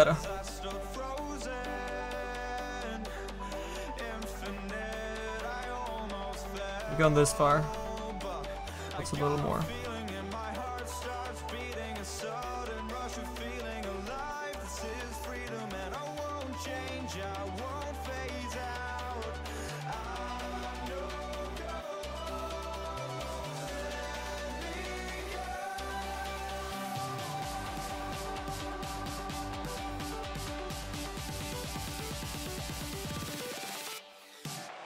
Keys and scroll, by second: 6.7 ctrl+z.